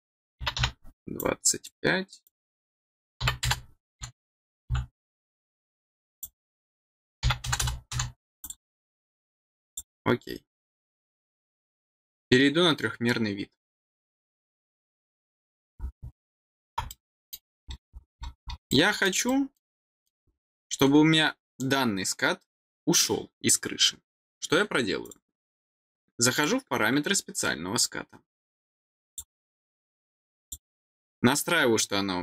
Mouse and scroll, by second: 1.1 click, 2.2 click, 5.5 click, 6.1 click, 8.3 click, 9.6 click, 14.0 click, 14.2 click, 15.7 scroll up 2, 16.0 middle click, 16.8 middle click, 17.9-18.4 scroll down 6, 18.6 middle click, 19.2 middle click, 19.8 middle click, 20.2 scroll down 2, 25.0 click, 26.3 click, 29.0 click, 30.3 click.